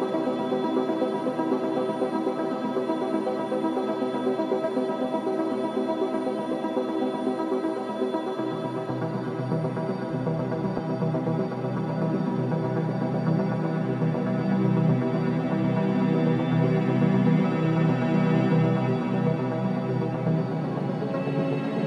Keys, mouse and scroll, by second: 0.2 alt+middle click, 1.0 space, 2.0 scroll up 1, 2.9 alt+middle click, 3.3 scroll down 1, 3.6 alt+middle click, 4.0 alt+right click, 4.9 alt+middle click, 5.4 alt+right click, 5.9 alt+middle click, 6.3 alt+right click, 8.2 click, 8.8 alt+click, 9.6 click, 11.9 alt+click, 12.2 alt+middle click, 12.7 alt+right click, 13.0 alt+middle click, 13.4 alt+right click, 13.8 alt+middle click, 14.2 alt+right click, 14.9 alt+click, 15.7 alt+right click, 16.4 right click, 17.4 click, 17.8 alt+right click, 18.0-19.5 alt+drag, 19.5 alt+right click, 20.2 alt+middle click, 20.7 alt+right click, 21.3 alt+right click.